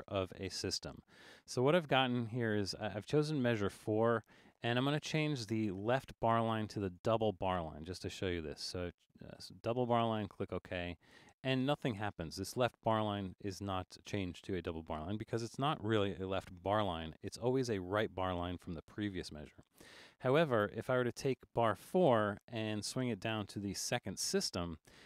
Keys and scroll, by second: 23.3 Down.